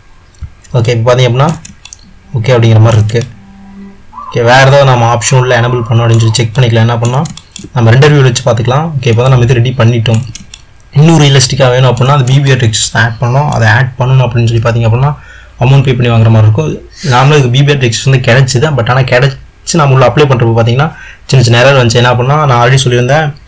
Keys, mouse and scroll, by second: 1.0-6.5 middle drag, 6.7-23.4 middle drag.